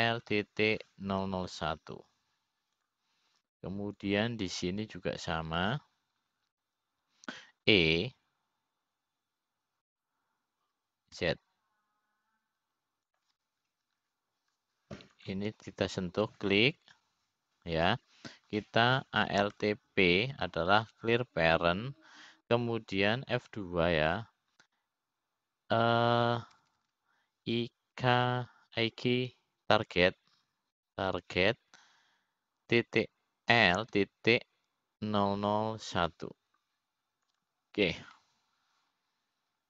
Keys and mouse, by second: 3.9 KP_0, 6.7-8.8 drag, 10.2 e, 17.9-20.1 drag, 22.2 alt+p, 26.2 F2, 29.4 BackSpace, 29.5 BackSpace, 38.0 KP_0.